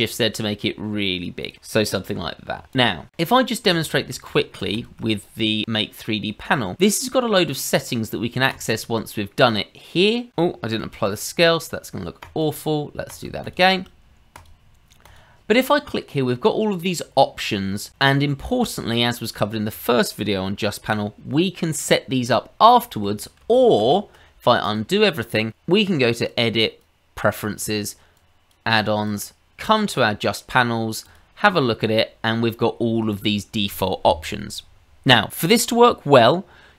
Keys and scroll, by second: 1.8 g, 9.7 ctrl+z, 10.8 ctrl+a, 23.4 ctrl+z, 23.7 ctrl+z.